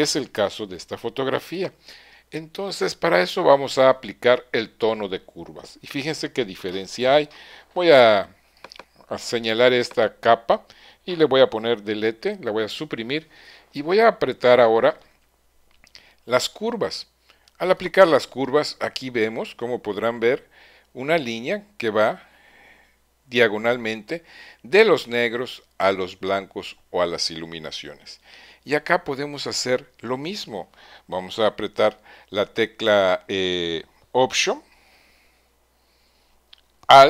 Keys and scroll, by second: 12.3 BackSpace.